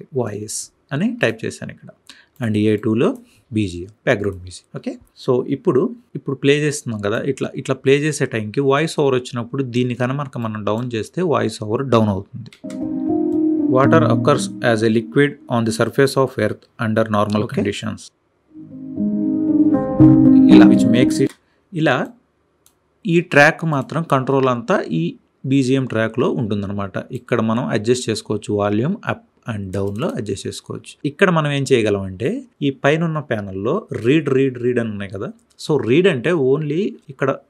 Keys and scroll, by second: 22.3 space.